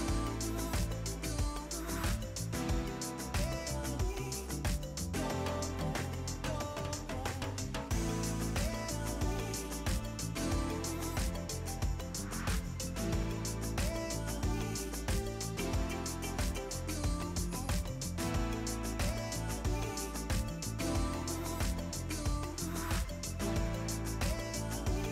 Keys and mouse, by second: 2.8 click, 3.3 ctrl+x, 3.3 click, 3.8 KP_0, 4.1 Return, 5.0 click, 6.0 right click, 6.2 click, 7.1 right click, 7.3 click, 8.0-9.4 typing, 9.8 click, 10.5 click, 11.0 right click, 11.1 click, 11.4 right click, 11.6 click, 14.2 Pause, 14.7 click, 16.1 click, 18.0 ctrl+shift+x, 18.1 click, 18.7-19.5 typing, 19.6 ctrl+e, 20.8 click, 21.6 ctrl+click, 22.2 ctrl+shift+x, 22.5 click, 23.1 4, 23.7 click, 24.6 click, 24.9 ctrl+click.